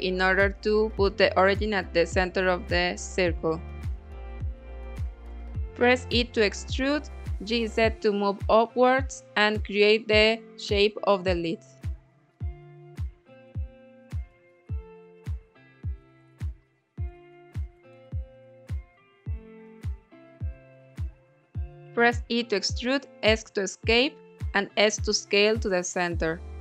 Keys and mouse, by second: 0.6 Tab, 0.8 1, 1.7 a, 2.3 e, 3.0 z, 4.0 click, 4.6 s, 6.1 click, 6.4 g, 6.6 z, 8.1 click, 8.5 s, 9.5 click, 11.2 e, 12.0 Escape, 12.6 s, 14.6 click, 15.0 e, 16.3 z, 18.3 click, 19.1 middle click, 21.4 e, 22.2 s, 23.0 click, 23.8 KP_1, 25.0 s, 26.4 click.